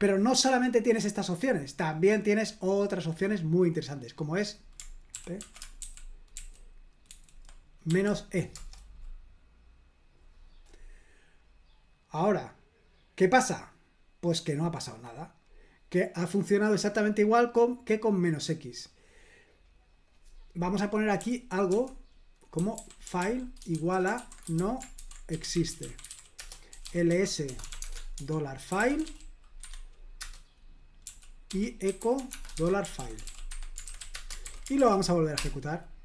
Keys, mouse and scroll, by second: 1.4-2.2 scroll up 2, 4.1 click, 5.1 ctrl+p, 5.4 ctrl+a, 5.8 alt+f, 5.9 alt+v, 6.4 alt+v, 7.1 alt+f, 7.9 e, 8.5 Return, 11.6-12.6 scroll down 1, 12.6 scroll down 1, 13.2-13.9 scroll down 1, 13.9-14.3 scroll down 1, 18.5-19.6 scroll up 2, 20.0 click, 21.2-34.4 typing, 29.6 Escape, 34.4 super+h, 34.8 ctrl+p, 35.4 Return.